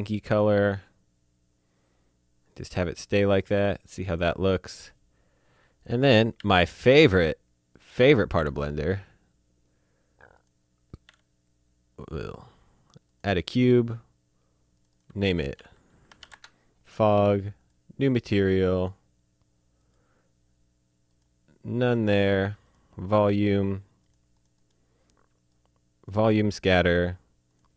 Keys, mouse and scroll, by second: 2.5 click, 3.6 click, 5.8 click, 6.3 shift+a, 7.7 click, 8.3 s, 10.3 click, 11.0 s, 13.1 click, 14.7 click, 15.5-16.2 typing, 16.3 Return, 17.6 click, 19.8 click, 22.6 click, 27.5 click.